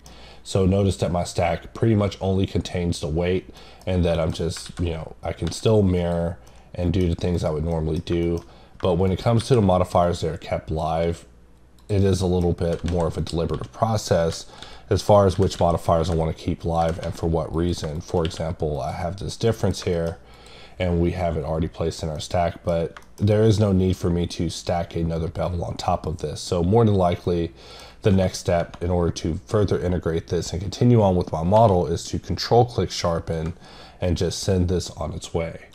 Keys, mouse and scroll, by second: 0.1-0.6 scroll down 1, 3.6 middle click, 4.2 middle click, 6.0 click, 6.5 middle click, 7.3 right click, 7.7 middle click, 8.2 middle click, 8.6 scroll up 1, 9.1 right click, 10.0 click, 11.8 click, 12.1 middle click, 13.2 click, 13.8 click, 17.5 click, 19.3 middle click, 19.9 middle click, 20.3 click, 22.2 middle click, 23.0 middle click, 23.3 double middle click, 23.7-24.9 scroll up 1, 26.1 click, 27.2 middle click, 33.1 middle click.